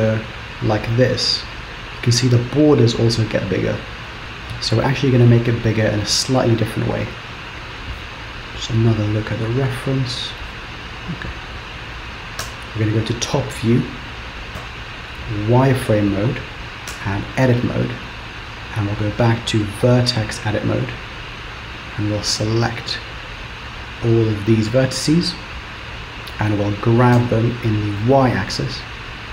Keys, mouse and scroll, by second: 12.5 KP_7, 14.7 z, 17.0 Tab, 17.7-18.6 scroll up 1, 19.7 click, 21.6 click, 22.4 click, 27.2 g.